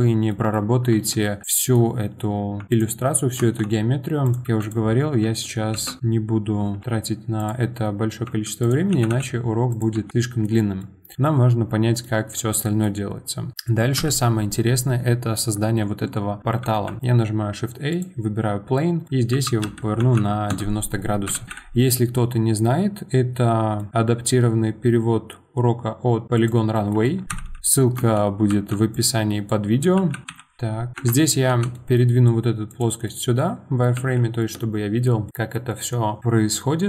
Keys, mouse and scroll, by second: 0.9 Tab, 1.5-2.6 middle drag, 2.6 Tab, 2.7 click, 3.1-3.4 scroll up 2, 3.4 Tab, 4.2 click, 4.4 2, 4.6 click, 5.7 ctrl+shift+b, 6.8 ctrl+b, 8.2 1, 8.6 click, 8.9 g, 9.9 Tab, 10.1 middle click, 10.5 scroll down 2, 10.8-12.9 middle drag, 12.9-13.5 scroll up 2, 13.5 middle click, 14.0 KP_1, 16.9 shift+a, 19.0 middle click, 19.3 r, 21.3 KP_1, 21.4 g, 26.7 middle click, 27.3 KP_1, 27.9 Tab, 28.5 1, 28.9 click, 29.9 g, 30.2 Tab, 30.3 KP_7, 30.9 g, 31.5 g, 33.0-33.9 middle drag, 33.9 z, 34.4-36.8 middle drag.